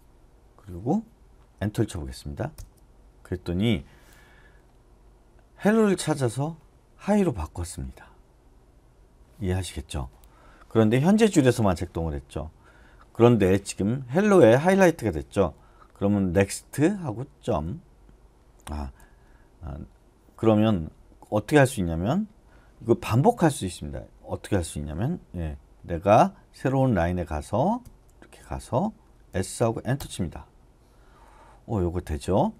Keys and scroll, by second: 2.5 Return, 16.3 typing, 17.4 ., 19.0 u, 27.8 shift+;, 29.3 s, 30.0 Return, 32.4 j.